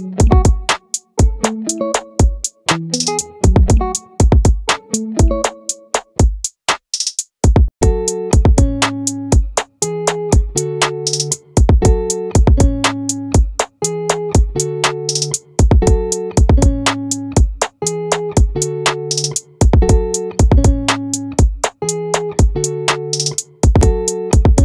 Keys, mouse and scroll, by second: 7.4-9.0 right drag, 9.0-10.6 middle drag, 15.8-17.4 middle drag, 21.2-22.6 right drag.